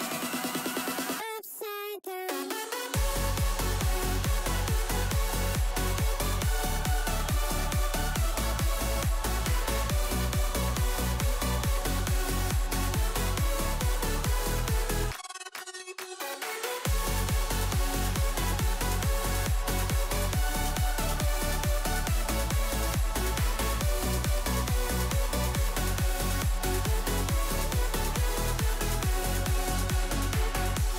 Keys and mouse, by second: 1.6-2.3 drag, 2.4 ctrl+z, 5.6 s, 7.7 i, 9.0-11.2 drag, 11.6 ctrl+z, 11.9 ctrl+z, 13.0 ctrl+z, 14.1-15.7 drag, 15.7 i, 16.5 i, 17.3-19.0 drag, 19.5 i, 20.3 click, 21.7 s, 22.8 i, 23.4 space, 24.8 space, 25.8-29.0 drag.